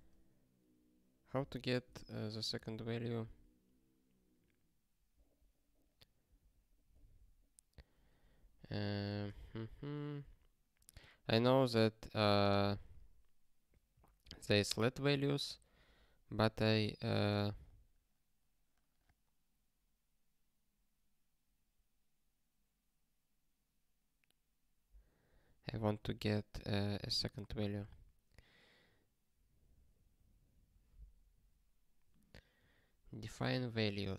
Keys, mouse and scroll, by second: 0.0-0.1 typing, 1.3 ctrl+b, 8.4 super+o, 9.7 ctrl+s.